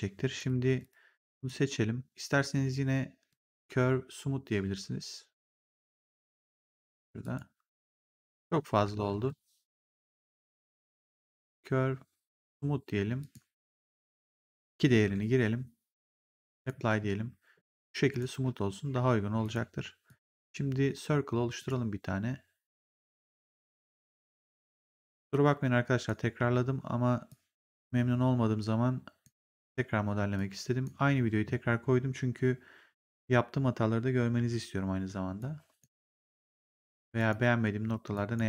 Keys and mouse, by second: 0.2 click, 3.2 click, 7.1 click, 9.0 ctrl+z, 11.3 click, 13.1 click, 14.2 click, 14.9 @, 16.5 click, 17.6 click, 19.3 click, 21.5 click, 23.3 click, 23.9 w, 25.2 click, 26.3 r, 27.2 click, 29.4 w, 30.2 click, 35.3 shift+click, 37.1 click, 38.0 shift+click.